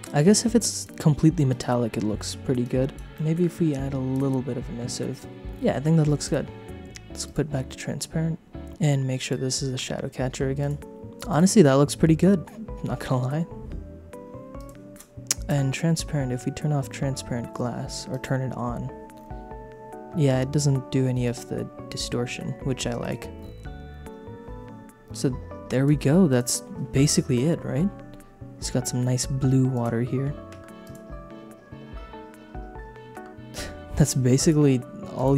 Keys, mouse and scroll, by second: 1.5 click, 2.6 click, 3.1 click, 3.1 middle click, 4.1-5.3 drag, 6.2 click, 7.2 click, 9.2 click, 10.6 click, 11.3 click, 14.5 click, 18.1 click, 21.2 click, 23.0 click, 26.3 click, 29.7 click, 30.5 space, 30.8 click, 33.2 space, 34.4 click, 35.1 click.